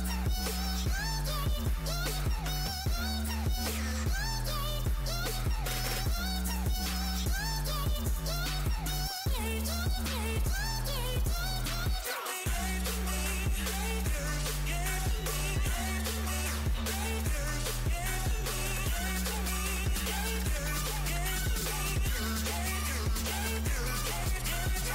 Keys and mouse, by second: 0.2 click, 0.9-2.3 right drag, 8.1 n, 10.2-13.2 drag, 13.2-14.5 right drag, 14.5-17.0 middle drag, 19.5 click, 21.8-24.9 right drag, 23.9 click.